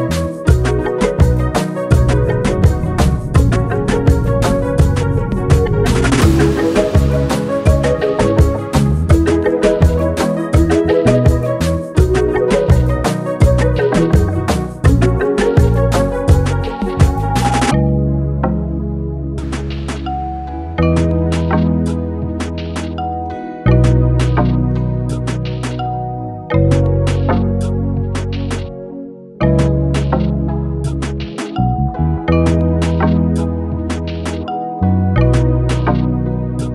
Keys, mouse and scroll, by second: 0.0 ctrl+r, 1.5-18.5 drag, 20.6-20.9 alt+scroll down 1, 22.5 space, 22.7 click, 22.9 space, 23.2-25.0 drag, 27.0 click, 28.7-33.2 drag, 33.3 click.